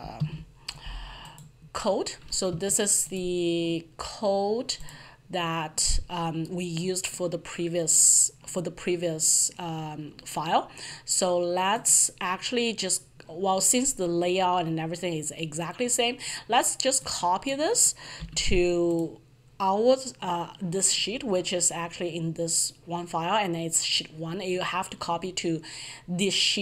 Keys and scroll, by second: 0.0 alt+F1, 0.4 alt+F11, 18.2 ctrl+c.